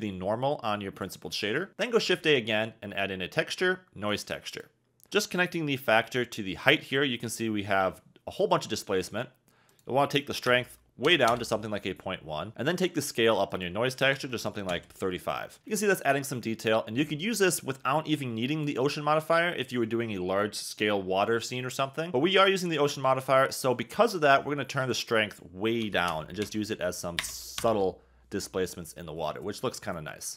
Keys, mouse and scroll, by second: 1.7 shift+a, 2.1 shift+a, 9.7-11.3 drag, 13.6-14.7 drag, 18.6 click, 24.9-27.6 drag.